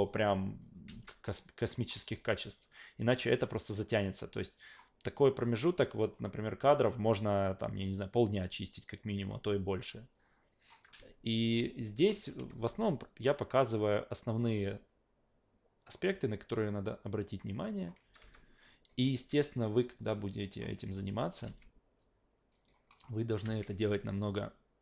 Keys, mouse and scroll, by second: 0.0 alt+right click, 0.4 alt+click, 0.9 alt+v, 1.8 click, 2.1 alt+right click, 2.3 alt+click, 3.4-4.7 drag, 5.2-5.8 drag, 6.8-9.3 drag, 10.1 click, 10.8 e, 11.6 click, 12.4 s, 12.6 s, 12.9-14.4 drag, 15.9 click, 17.2 click, 18.0 s, 18.2 s, 18.7 click, 20.1 click, 20.8 s, 21.3 click, 21.5 alt+v, 22.5 alt+right click, 22.9 alt+middle click, 23.4 alt+v, 24.0-24.8 drag.